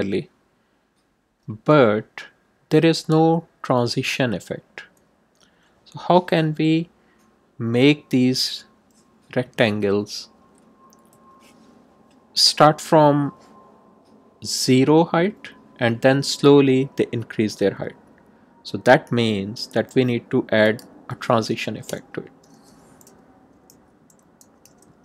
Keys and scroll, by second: 21.8 Return, 22.2 Tab, 23.7-25.0 typing.